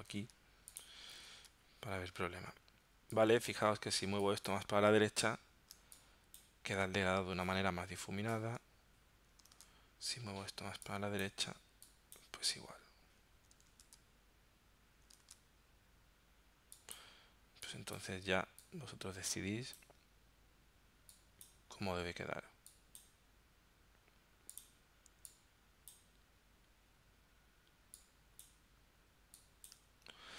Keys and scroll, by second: 7.4 super+Tab, 9.6 super+Tab, 13.7 super+Tab, 15.4 super+Tab.